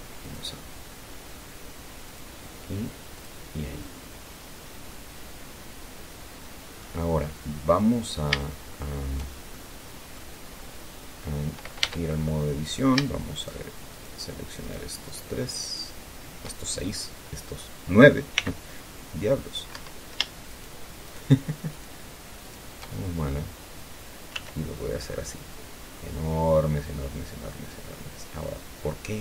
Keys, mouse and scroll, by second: 0.6 click, 2.4 click, 3.5 click, 5.2-7.3 middle drag, 7.3-8.2 scroll up 1, 8.2 scroll down 1, 8.5 scroll up 1, 8.8-10.7 shift+middle drag, 10.7-12.2 scroll up 2, 12.2 Tab, 13.0 right click, 13.7 shift+right click, 14.0 shift+middle click, 14.2 shift+right click, 15.0 shift+right click, 15.4 shift+right click, 15.8 shift+right click, 18.7 c, 19.1-20.1 drag, 20.1 Escape, 20.8 shift+right click, 21.4 shift+right click, 22.1 shift+right click, 22.8 shift+right click, 23.3-23.8 shift+scroll down 3, 24.7 s.